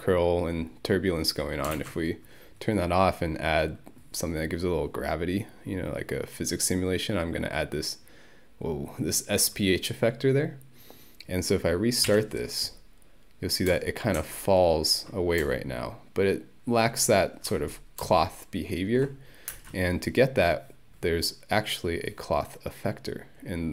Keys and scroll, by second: 1.8 ctrl+1, 12.1 Home, 19.5 space.